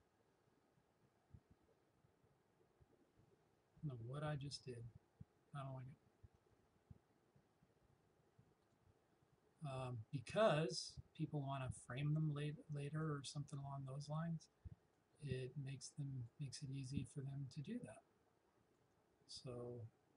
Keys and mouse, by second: 4.7 click, 6.4 Escape, 8.6-20.1 drag.